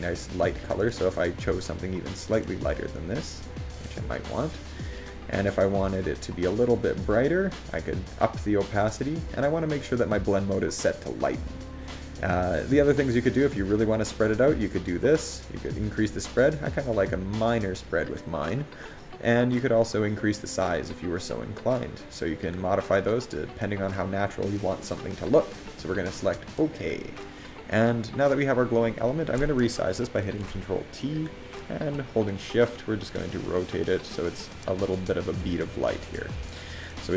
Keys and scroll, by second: 31.9 ctrl+t.